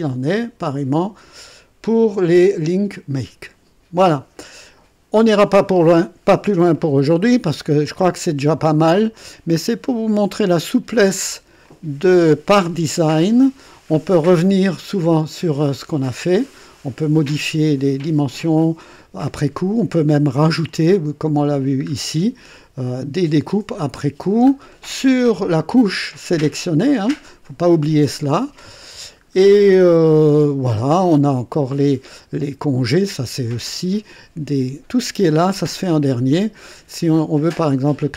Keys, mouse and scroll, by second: 5.1 click, 5.9 scroll down 1, 6.7 right click, 7.8 click, 9.6 right click, 10.4 click, 11.6-12.9 drag, 13.0 right click, 14.7-17.4 drag, 19.9-20.8 drag, 21.8-22.2 scroll up 2, 24.5 scroll down 2, 28.9 scroll down 2, 36.9-38.1 drag.